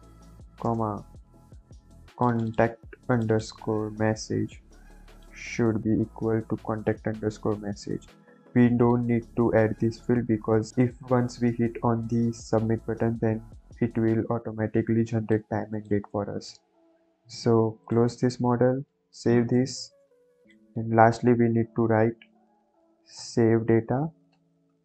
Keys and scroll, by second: 0.6 ,, 0.6 space, 4.2 ctrl+c, 5.6 ctrl+v, 6.4 =, 6.6 ctrl+v, 19.0 ctrl+s, 21.1 Return, 23.1 s, 24.3 a, 24.5 v, 24.6 e.